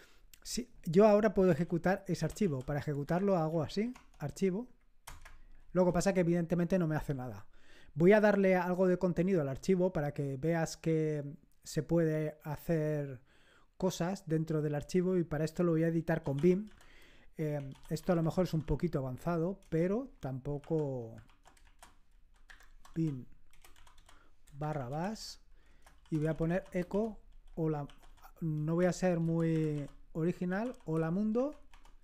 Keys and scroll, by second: 1.5 typing, 2.7-4.1 typing, 5.0 Return, 15.9-19.0 typing, 19.5 Return, 20.5 Insert, 21.2-31.6 typing.